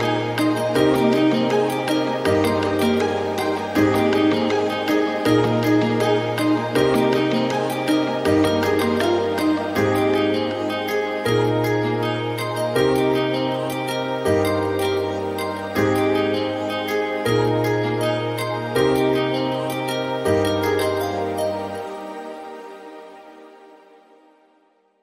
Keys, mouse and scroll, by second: 0.3-1.5 scroll down 1, 1.5-5.5 scroll down 1, 5.5-25.0 scroll down 1.